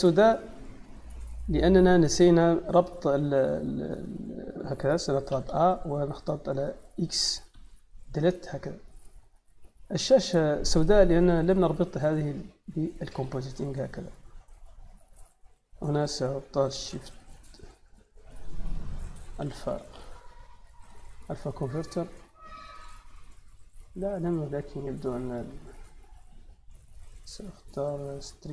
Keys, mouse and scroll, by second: 1.1 click, 2.5 click, 3.5 click, 4.4 click, 5.2 a, 7.4 x, 7.9 click, 10.1 click, 12.0-14.4 drag, 15.5 click, 16.7 shift+a, 17.2 click, 19.1 a, 19.6 l, 21.6 click, 22.7 click, 24.6-25.7 drag, 27.0 click, 28.2 click.